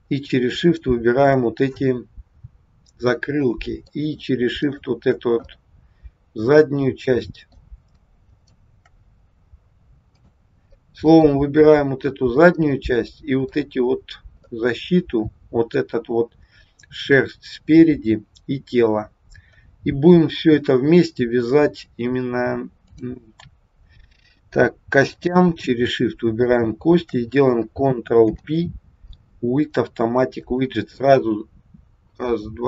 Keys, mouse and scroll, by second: 0.7 shift+click, 3.2 middle click, 4.5 shift+click, 5.4 middle click, 8.2 shift+click, 10.2 click, 10.8 middle click, 12.6 middle click, 14.4 middle click, 22.8 click, 26.3 shift+click, 28.2 ctrl+p.